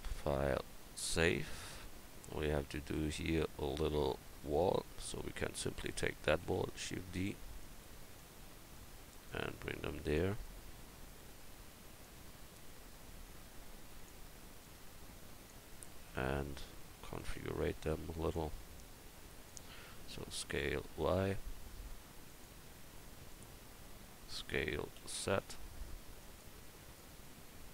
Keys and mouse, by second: 1.6-1.9 middle drag, 6.4 shift+d, 10.6-11.0 drag, 11.0-12.6 middle drag, 12.0-14.1 drag, 12.0-12.6 right drag, 14.6-15.7 drag, 15.7 middle drag, 16.3 middle click, 18.3-19.5 drag, 20.0 s, 23.3-25.0 drag, 25.0 s, 27.0-27.7 drag.